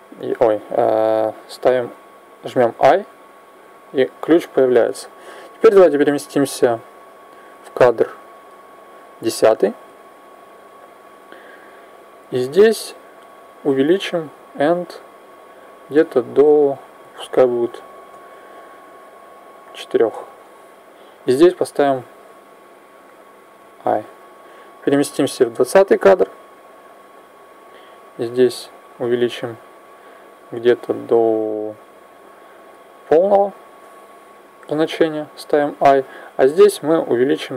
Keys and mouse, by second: 2.5 i, 5.6 click, 12.9 click, 16.4 click, 22.9 i, 23.3 i, 24.9 click, 27.7-29.6 drag, 34.9 i, 37.1 click.